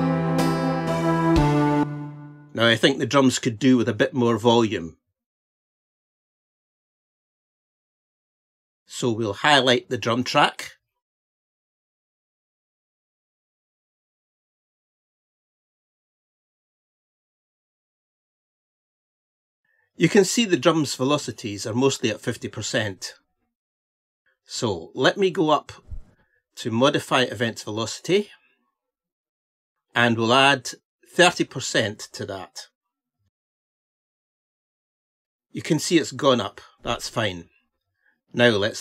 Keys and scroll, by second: 4.6 ctrl+-.